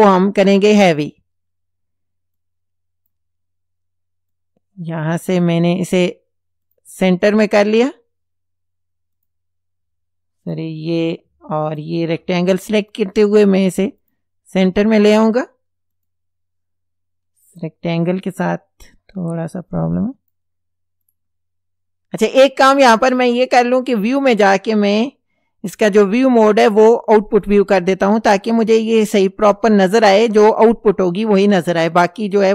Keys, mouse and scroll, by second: 1.0 click, 2.4 click, 4.3 click, 6.7 click, 9.2 click, 10.5 click, 11.7 ctrl+click, 14.0 click, 16.0 click, 17.5 click, 19.4 click, 21.1 click, 24.1 click, 27.5 click, 32.1 click.